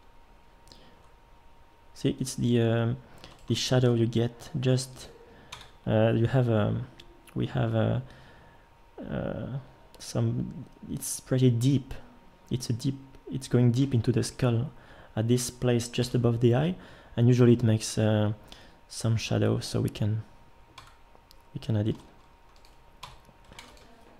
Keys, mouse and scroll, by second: 3.9 g, 5.5 Tab, 16.0 KP_7, 20.8 Tab, 21.9 g, 23.0 Tab, 23.6 ctrl+s.